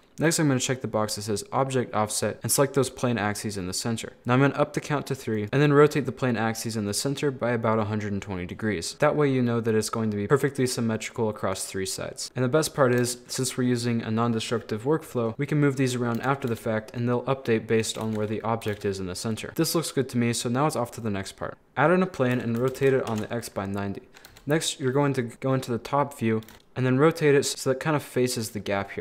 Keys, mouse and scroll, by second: 0.2 click, 2.1 click, 4.2 click, 5.4 right click, 5.4 r, 8.9 middle click, 9.3 scroll up 4, 9.5 middle click, 10.3-12.2 middle drag, 12.2 a, 12.3 middle click, 13.0 KP_7, 13.6-15.3 scroll up 3, 15.3 middle click, 16.2 KP_7, 16.5 g, 18.1 ctrl+z, 18.6 g, 19.5-21.0 middle drag, 21.5 shift+a, 22.4 r, 24.3 KP_7, 26.5 r, 27.5 g, 28.6 middle click.